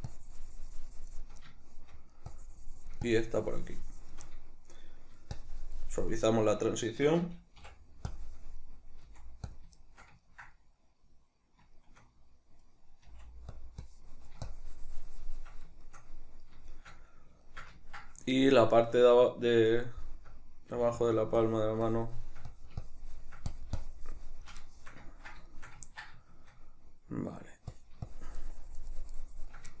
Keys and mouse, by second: 1.5 shift+middle click, 2.3-4.3 drag, 4.3-5.3 middle drag, 5.3-6.9 shift+drag, 6.9-8.1 shift+middle drag, 8.1-9.6 drag, 9.1 f, 9.8-13.6 shift+middle drag, 13.1 f, 13.8-15.8 drag, 15.8-21.1 shift+middle drag, 20.7 f, 21.4-24.6 drag, 24.6-27.8 shift+middle drag, 27.8-29.8 drag.